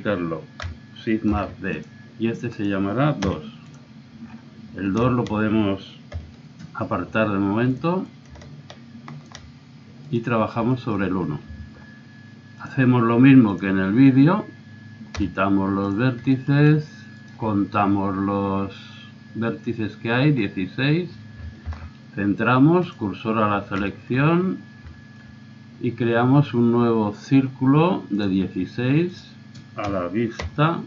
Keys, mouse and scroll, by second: 1.3 shift+d, 4.8-6.2 middle drag, 6.2 KP_1, 9.6 click, 10.0 right click, 10.4-11.6 middle drag, 12.6 click, 12.8 click, 13.6 click, 14.2 middle click, 14.4-16.3 middle drag, 15.2 x, 17.2 right click, 18.9 right click, 19.0 middle click, 21.7 shift+s, 23.9 middle click, 24.2 click, 24.3 middle click, 26.8-28.2 middle drag, 28.2-30.7 drag.